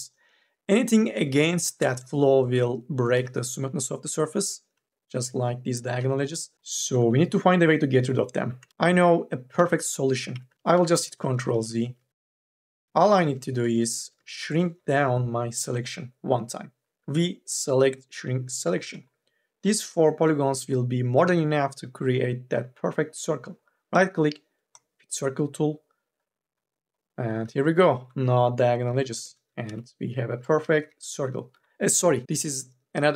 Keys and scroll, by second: 2.9 2, 3.4 e, 8.7 ctrl+z, 9.7 ctrl+z, 10.6 ctrl+z, 14.3 ctrl+z, 14.6 3, 16.8 v, 28.8 3, 29.1 e, 29.3 2, 29.5 e, 30.5 4, 31.0 3, 31.4 e.